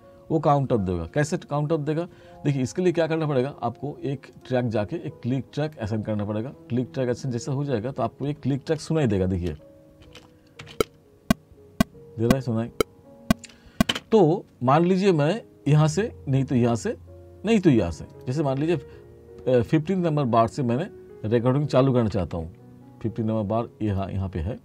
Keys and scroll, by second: 9.1 7, 9.5 space, 10.7 7, 10.8 space, 14.0 space, 22.2 t.